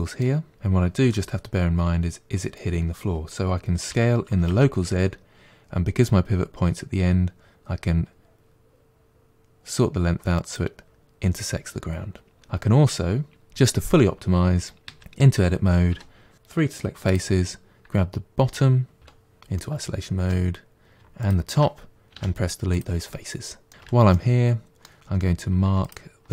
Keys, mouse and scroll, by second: 0.5 KP_Decimal, 0.9 KP_1, 3.7 s, 14.8 Tab, 15.7 3, 16.9 click, 19.0 KP_Divide, 19.4-21.1 middle drag, 21.1 shift+click, 22.0 Delete, 23.6 middle click, 23.7 2, 24.0-25.7 middle drag, 25.7 alt+click.